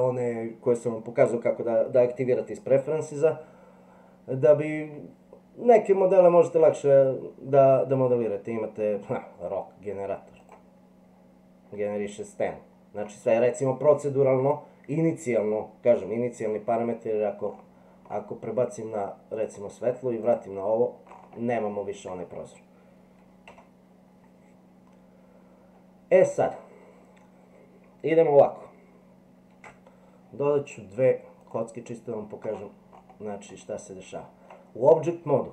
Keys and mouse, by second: 20.2 click, 23.5 Delete, 29.5 shift+a, 33.7-34.5 middle drag.